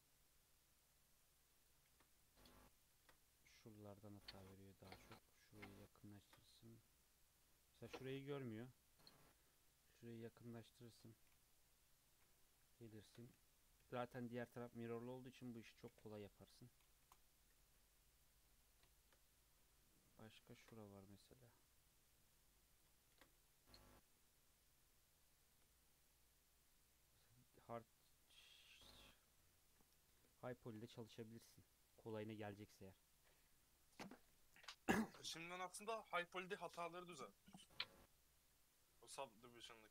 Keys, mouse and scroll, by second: 1.9 ctrl+r, 3.0 ctrl+r, 6.3 ctrl+r, 11.5 KP_3, 12.2-12.6 scroll up 5, 12.8 shift+middle click, 13.8 k, 17.6 Tab, 17.8-18.1 scroll down 3, 18.1 middle click, 18.6 scroll down 2, 18.9-19.2 shift+middle drag, 19.2 scroll up 1, 19.6 Tab, 20.5 ctrl+r, 23.1 ctrl+r, 25.7 Tab, 25.9 scroll down 2, 26.1-27.8 middle drag, 27.8-28.4 scroll up 2, 28.4 scroll up 1, 28.6-31.8 shift+middle drag, 35.0-35.4 scroll down 4, 35.4-36.6 middle drag, 36.6-37.1 scroll up 2, 37.1-38.3 middle drag, 38.3 Tab, 38.7-39.3 scroll up 3, 39.5-39.9 shift+middle drag.